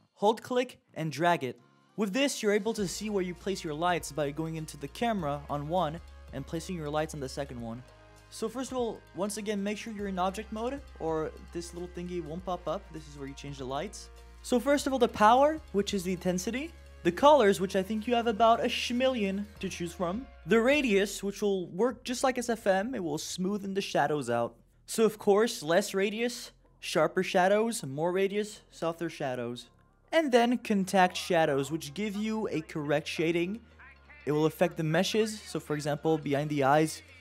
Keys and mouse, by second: 0.3-0.7 middle drag, 1.8 KP_0, 3.1-4.3 middle drag, 6.4 click, 15.6-17.2 drag, 22.5-28.0 drag, 29.5-29.9 middle drag, 30.7 click, 34.3 click, 34.8 click, 35.1 click, 35.7 click, 36.0 click, 36.7 click, 37.0 click.